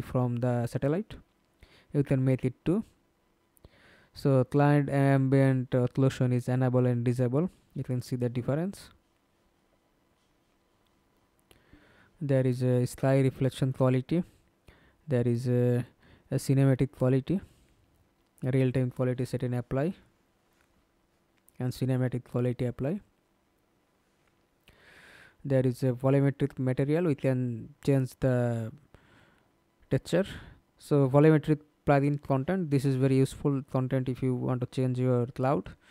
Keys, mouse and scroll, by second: 2.0-3.1 scroll down 18, 9.8-11.6 scroll down 15, 11.6-12.8 scroll down 10, 12.9 scroll up 3, 13.2-14.6 scroll down 15, 21.7-22.6 scroll down 5, 22.6-23.6 scroll down 7, 23.6-23.9 scroll down 8, 24.6 scroll down 2, 26.7-27.3 scroll down 6, 28.1 scroll down 2, 28.8-30.6 scroll down 7, 33.9-35.9 scroll down 1.